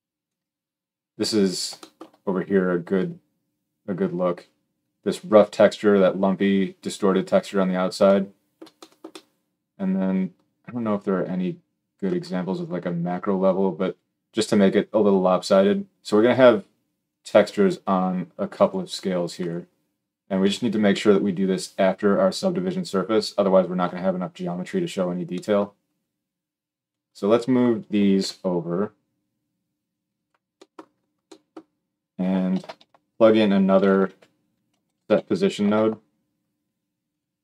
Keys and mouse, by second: 19.2 click, 19.3-26.7 middle drag, 26.7-30.0 drag, 28.0 g, 32.3 shift+a.